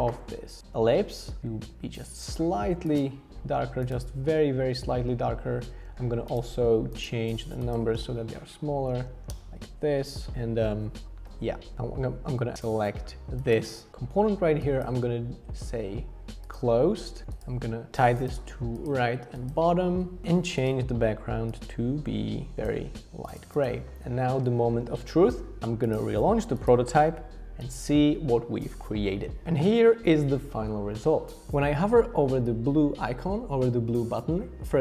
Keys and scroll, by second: 8.9 Page_Down, 9.0 Page_Down, 9.2 Down, 9.3 Down, 9.3 Up, 9.3 Return, 10.3 alt+v.